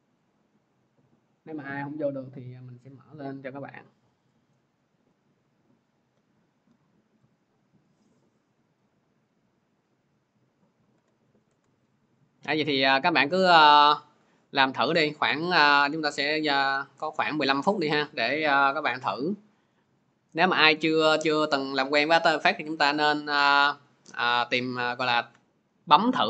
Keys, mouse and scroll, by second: 7.2-10.8 drag, 10.8 alt+Tab, 11.3 alt+Tab, 16.6 click, 17.3-21.6 drag.